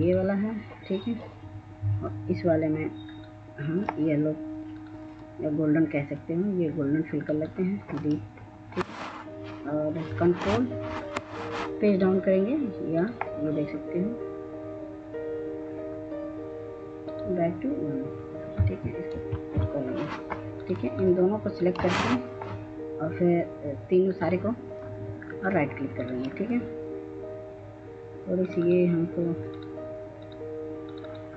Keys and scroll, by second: 19.3 ctrl+Page_Up.